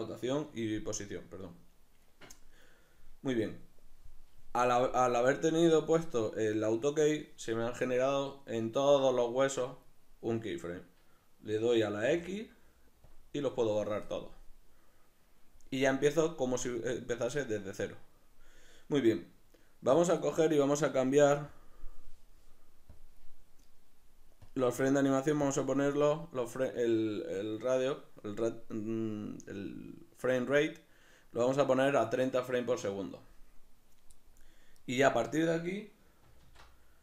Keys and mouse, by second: 8.0-21.5 middle drag, 12.1 x, 21.5-34.8 drag, 34.8 right click, 36.4 alt+q.